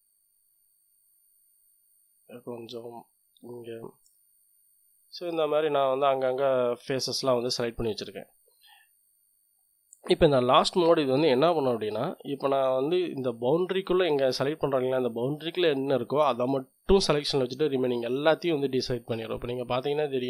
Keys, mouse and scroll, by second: 0.5-1.5 scroll up 1, 1.5-2.5 drag, 2.7-3.8 drag, 4.0 click, 4.5-6.6 drag, 6.8 click, 8.1 click, 10.2 click, 11.4 middle click, 11.9 scroll up 1, 12.4 middle click, 13.4-18.6 drag, 19.3 click, 19.6 middle click, 20.1 click.